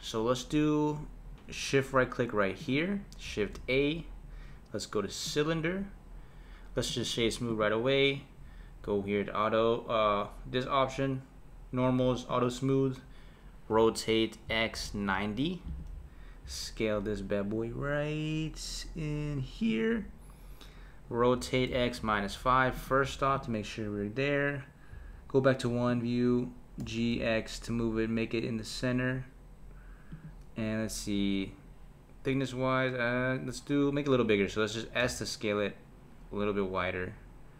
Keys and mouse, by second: 2.6 shift+right click, 3.2 shift+a, 6.9-9.9 right drag, 12.3 click, 13.7 r, 16.4 s, 21.3 r, 23.3 click, 24.9 KP_1, 25.9 click, 26.8 g, 35.0 s.